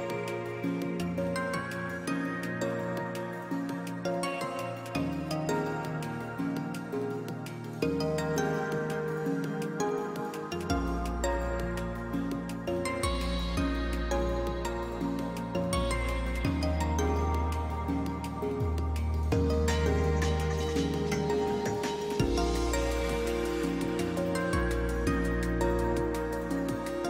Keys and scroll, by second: 1.3 ctrl+space, 1.6 ctrl+space, 8.1 space, 16.8 space.